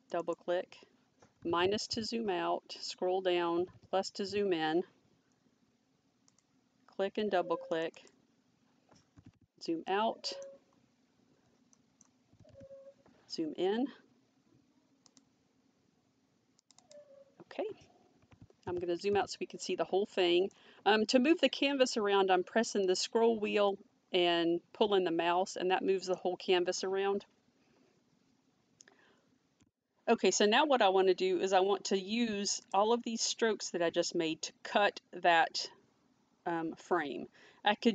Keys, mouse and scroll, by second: 0.0 click, 2.2 scroll down 1, 6.3 click, 8.2 click, 9.9 middle click, 11.8 middle click, 15.1 click, 19.7 middle click, 22.9 middle click, 32.6 click.